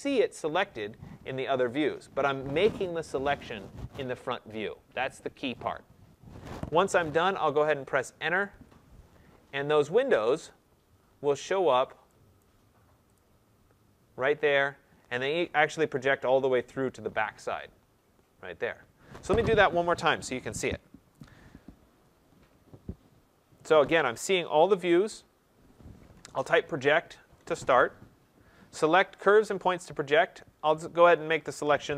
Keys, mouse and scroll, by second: 8.4 Return, 9.9-11.6 scroll, 11.6-12.2 scroll, 12.2 scroll, 12.3 right click, 13.1 click, 13.4-13.8 scroll, 13.8-14.3 scroll up 5, 14.4-14.8 scroll down 2, 20.9 middle click, 21.0 ctrl+z, 21.6 middle click, 21.7 middle click, 21.8 middle click, 23.0 middle click, 26.2-27.3 typing, 30.6 click.